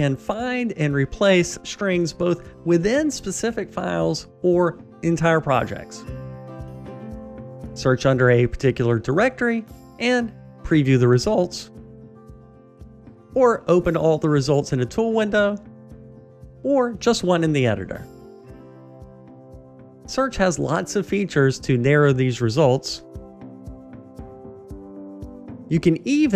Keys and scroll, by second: 8.3 shift+super+f, 19.4 shift+super+r.